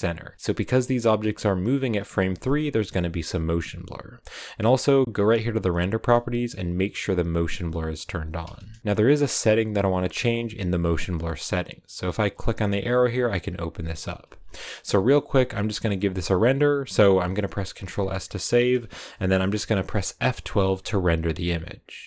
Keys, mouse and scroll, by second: 1.1-7.0 right drag, 7.0-8.8 drag, 8.8-12.2 shift+middle drag, 18.5-22.0 middle drag.